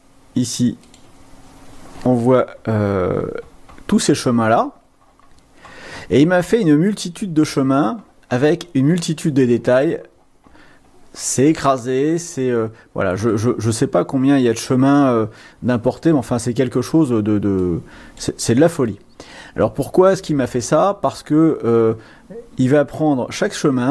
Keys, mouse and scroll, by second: 0.0 click, 0.9 click, 1.3 click, 2.9-4.2 scroll down 6, 7.3-8.2 scroll down 3, 9.0-11.4 scroll down 7, 13.6-16.2 drag, 17.8 click, 19.0-23.9 drag.